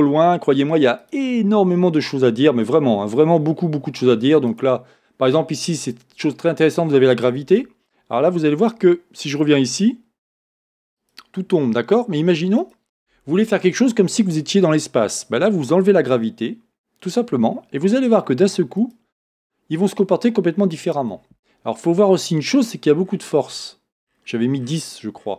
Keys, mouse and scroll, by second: 1.1-4.8 drag, 1.6-2.8 scroll down 1, 2.8-4.5 scroll down 1, 5.1 scroll down 1, 8.6-12.0 drag, 12.7-14.1 drag, 16.1-21.2 drag, 23.1-24.1 scroll up 1.